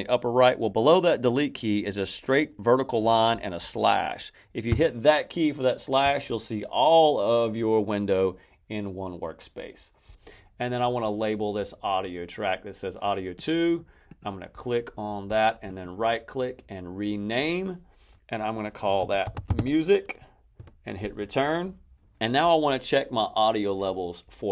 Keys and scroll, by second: 4.6 \, 18.7-20.0 typing, 20.5 Return.